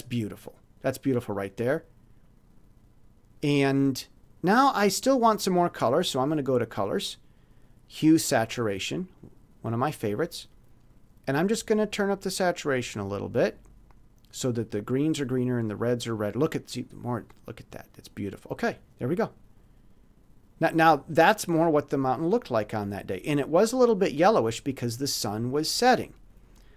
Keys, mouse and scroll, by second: 3.4 click, 6.3 middle click, 9.1 middle click, 12.6 middle click, 15.1 click, 18.6 click, 26.6 click.